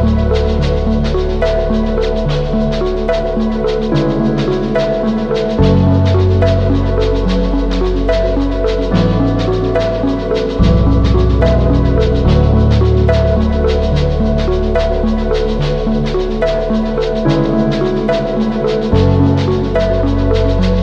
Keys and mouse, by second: 0.0-1.5 middle drag, 1.6 Tab, 2.1-3.3 middle drag, 4.9 alt+h, 5.6 a, 5.8 ctrl+s, 6.5-7.0 middle drag, 7.2 shift+middle click, 7.6 a, 7.9 Tab, 9.2 shift+middle click, 10.6 a, 11.3 u, 12.2 a, 14.6 shift+middle click, 16.1 shift+middle click, 17.2 shift+middle click, 18.8-20.4 shift+middle drag.